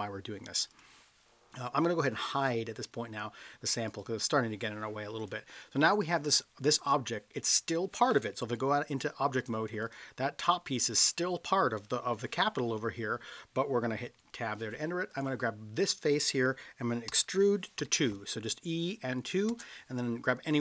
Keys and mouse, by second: 0.7 click, 3.9 click, 8.4 Tab, 14.1 Tab, 15.1 click, 17.2 e, 17.8 2, 19.5 Return, 20.5 click.